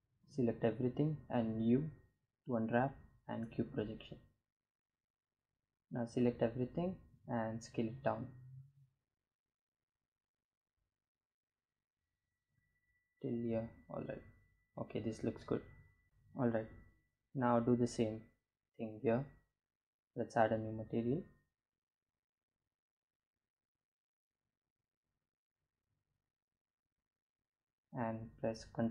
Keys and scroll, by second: 4.6 a, 5.5 s, 10.9 Tab, 27.7 ctrl+shift+t.